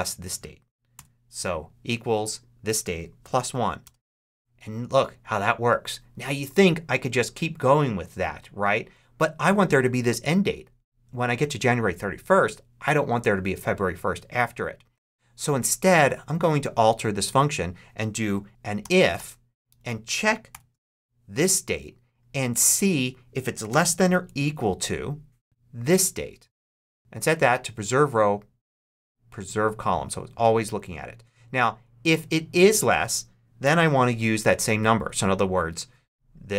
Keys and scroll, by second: 0.8 =, 2.9-3.8 typing, 18.7 shift+i, 19.0 shift+f, 20.4 shift+9, 24.4 shift+=, 25.4 super+z, 33.5 ,.